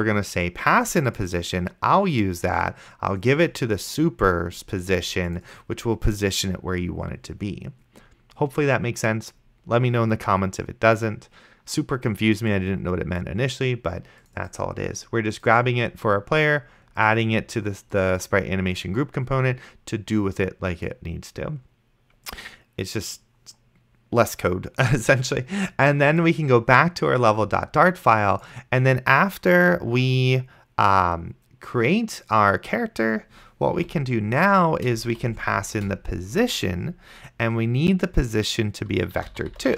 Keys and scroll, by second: 34.1 ,, 35.0 space, 35.2 p, 35.8 Return, 39.1-39.7 typing.